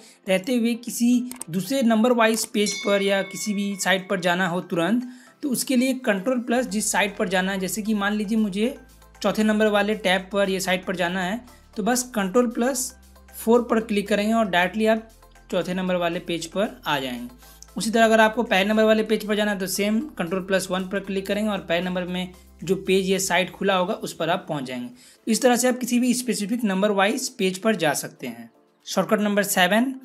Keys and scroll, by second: 13.3 ctrl+4, 20.5 ctrl+1.